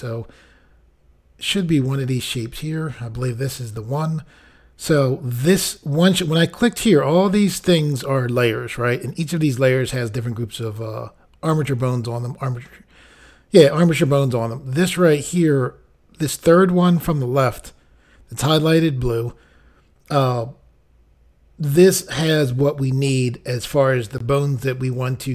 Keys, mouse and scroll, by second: 1.4 click, 1.5 click.